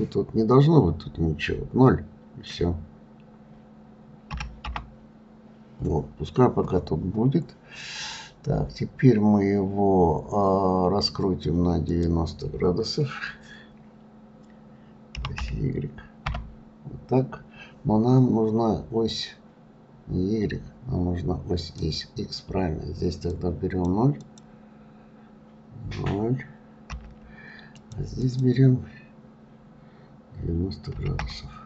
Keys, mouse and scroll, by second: 7.8-11.1 scroll down 2, 11.9-14.9 drag, 21.6-23.8 drag, 24.2-27.2 drag, 28.2-31.2 drag.